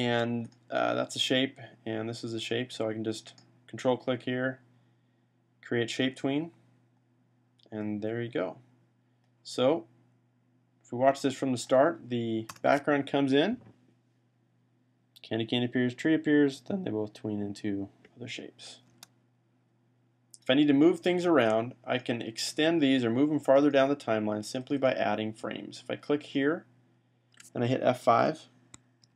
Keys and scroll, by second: 0.0 v, 28.9 F5.